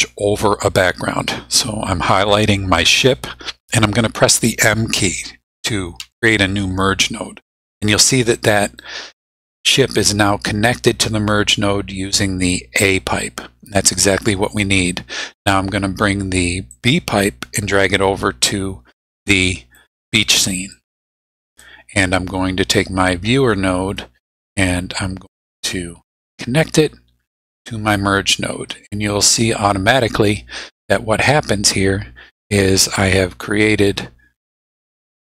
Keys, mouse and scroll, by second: 2.3 click, 6.0 m, 7.7-9.0 drag, 16.7-20.0 drag, 20.7 click, 22.7-24.2 drag, 25.3-25.9 drag, 26.2-28.2 drag, 29.1-29.8 drag, 32.4-33.6 drag, 34.2 scroll down 2, 34.7-35.3 drag.